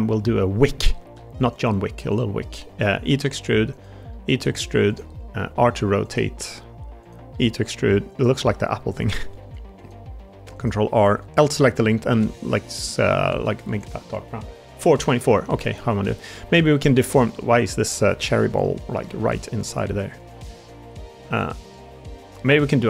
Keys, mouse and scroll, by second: 1.0 s, 3.0 e, 4.0 e, 5.0 middle click, 5.4 r, 6.3 s, 7.2 e, 8.4 g, 9.3 ctrl+r, 10.4 click, 11.3 l, 11.8 a, 12.1 g, 15.3 middle click, 15.9 middle click, 16.4 shift+middle click, 17.4 Tab, 17.6 click, 18.4 click, 19.1 ctrl+z, 20.5 click, 21.2 Tab, 22.1 l.